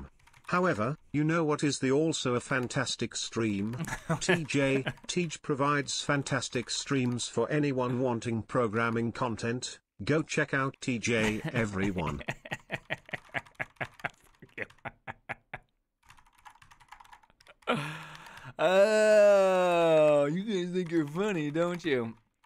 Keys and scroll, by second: 0.0-9.4 typing, 10.6 ctrl+u, 10.9 ctrl+u, 11.8-14.9 typing, 16.1-22.4 typing.